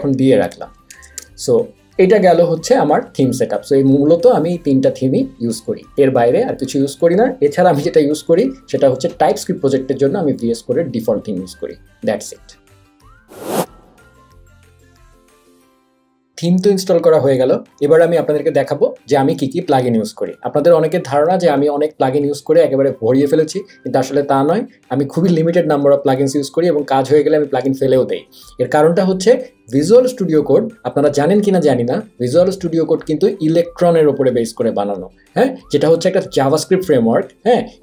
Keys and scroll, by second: 0.9 super+a, 1.2 BackSpace.